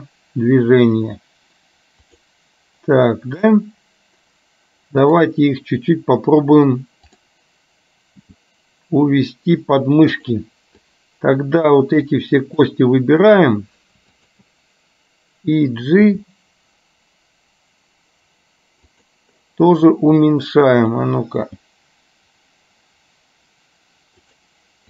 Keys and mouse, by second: 7.1 click, 8.3 g, 10.9 click, 12.1 click, 16.1 g, 20.4 click, 21.4 g.